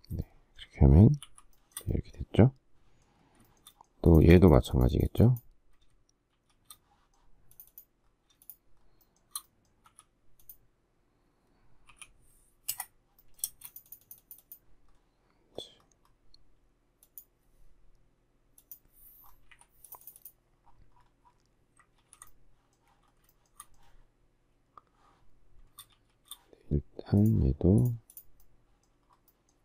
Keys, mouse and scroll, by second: 1.2 shift+c, 1.5 shift+middle click, 3.5 shift+middle click, 6.3 shift+s, 8.4 shift+click, 8.8 shift+scroll, 9.0 shift+middle click, 9.9 f, 11.9 2, 12.7 Return, 13.5 space, 19.5 Delete, 22.0 ctrl+g, 23.3 shift+middle click, 25.9 shift+s.